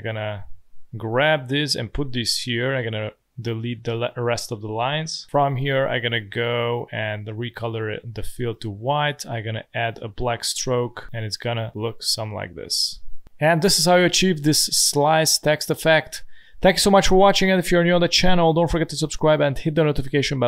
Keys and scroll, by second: 4.8 Delete, 11.0 space, 13.2 space.